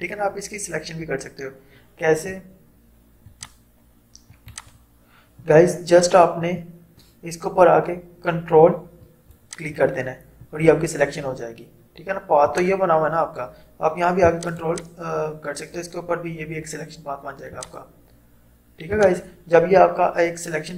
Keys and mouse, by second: 3.4 alt+click, 9.1 ctrl+click, 17.6 click.